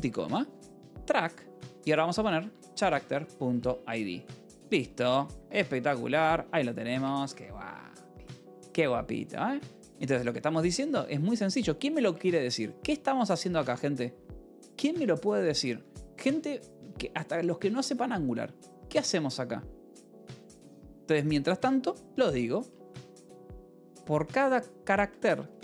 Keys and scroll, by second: 0.0-4.4 typing, 4.9 Return, 5.2 Escape, 6.4 ctrl+s, 6.8 a, 6.9 Return, 7.1 Escape, 10.6-12.9 typing, 13.4 Tab, 14.1 Escape, 14.3 k, 14.9 a, 15.4 Tab, 18.7 Escape, 19.2 k, 22.6 l, 23.5 v, 24.1 e, 24.9 Escape, 25.2-25.6 typing.